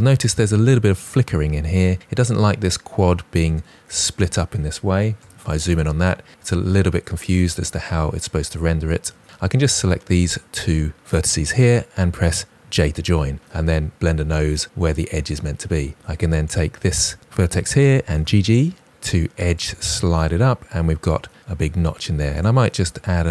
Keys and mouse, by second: 5.1 KP_Decimal, 10.9 shift+middle click, 11.0 shift+drag, 12.5 j, 13.2 click, 17.5-19.7 typing, 20.5 click, 20.7 shift+middle click, 22.2 click, 22.4 middle click, 22.7 g, 23.2 click.